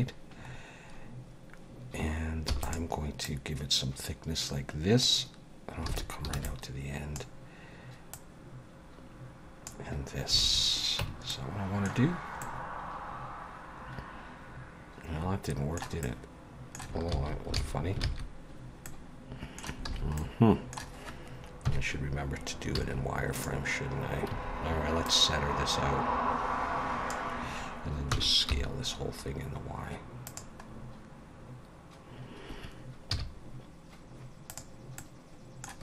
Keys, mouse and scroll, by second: 0.4-1.6 scroll up 3, 2.5 e, 3.2 click, 5.9 alt+a, 6.3 b, 8.1 click, 10.4 alt+a, 11.0 Tab, 11.3 middle click, 12.1-12.4 scroll down 3, 12.4 middle click, 16.0 middle click, 17.2 ctrl+z, 17.6 ctrl+z, 18.1 ctrl+z, 18.9 middle click, 19.9 alt+a, 20.2 middle click, 21.7 KP_3, 22.8 z, 24.3 a, 25.0 click, 28.1 s, 30.7-31.1 scroll up 3, 33.1 z, 35.0 middle click.